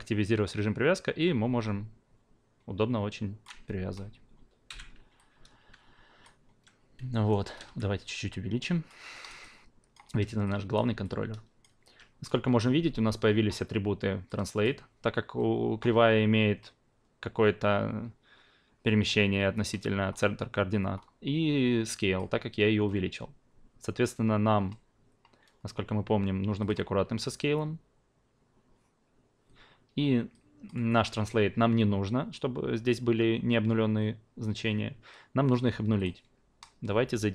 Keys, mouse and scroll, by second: 5.1-6.2 alt+drag, 7.1 alt+right click, 7.4 alt+click, 7.6 r, 8.1-8.8 drag, 9.1 alt+right drag, 9.4-9.9 alt+drag, 10.4-10.7 drag, 11.0-11.6 alt+drag, 14.3 click, 20.1-20.9 scroll down 2, 20.9 scroll up 2, 21.8 click, 26.6 click, 30.3 click, 35.9 click.